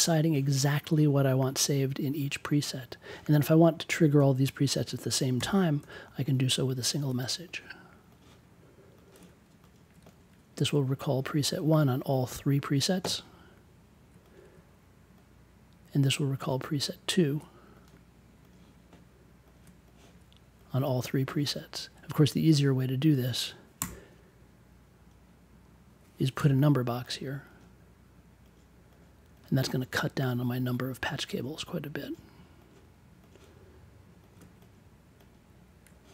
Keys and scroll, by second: 5.3 m, 5.8 1, 23.7 BackSpace.